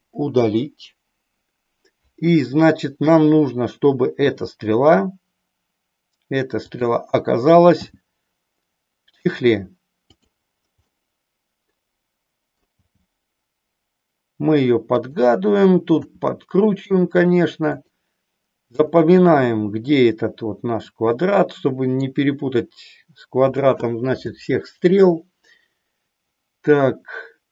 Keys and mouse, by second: 0.2 Delete, 4.2 r, 6.8 click, 7.9 g, 10.8-12.6 middle drag, 12.8 g, 16.0 r, 20.8-22.2 middle drag, 24.9-27.5 middle drag.